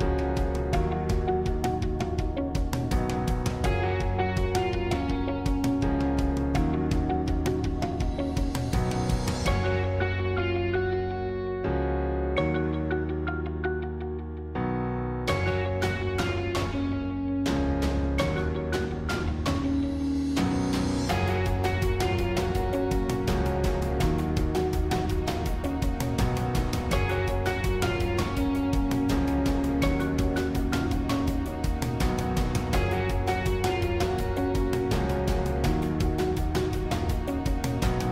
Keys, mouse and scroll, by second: 2.2-5.4 middle drag, 7.6 click, 8.5 middle click, 9.0 click, 9.5 middle click, 10.0 right click, 10.9-12.6 drag, 12.6-15.8 middle drag, 15.8 shift+click, 16.8-18.4 middle drag, 18.4-19.4 shift+drag, 19.4-21.4 middle drag, 21.4 shift+click, 22.6-24.4 middle drag, 24.4 shift+click, 25.4-28.1 middle drag, 28.1 alt+e, 32.9-35.7 middle drag, 35.7 click, 36.2-37.4 middle drag, 37.4 click, 37.9-38.1 scroll down 1.